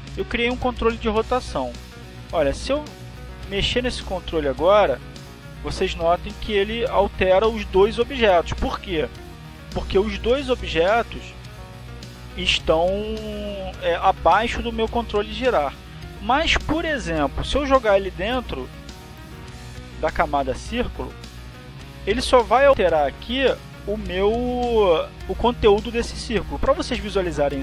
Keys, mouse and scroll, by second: 1.8 click, 5.4 click, 6.4 click, 7.1 click, 8.4 ctrl+z, 10.0 ctrl+z, 21.3-22.5 drag, 23.0 click.